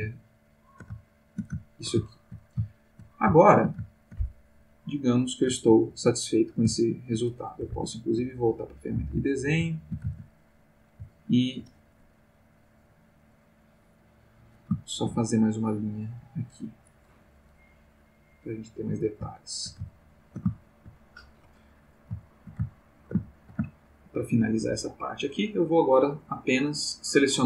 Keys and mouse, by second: 0.1-1.0 ctrl+middle drag, 1.1-1.6 ctrl+shift+middle drag, 1.7 ctrl+shift+middle click, 2.1 ctrl+shift+middle click, 2.7-3.2 ctrl+shift+middle drag, 3.4-3.8 shift+middle drag, 4.0 ctrl+shift+middle click, 6.8 ctrl+middle click, 7.7 ctrl+Tab, 8.5 ctrl+click, 9.0-10.1 ctrl+middle drag, 10.6 ctrl+click, 11.0 ctrl+middle click, 13.6 click, 14.9 ctrl+z, 15.5 ctrl+click, 18.3 click, 19.3-21.0 shift+middle drag, 22.2-24.3 shift+middle drag.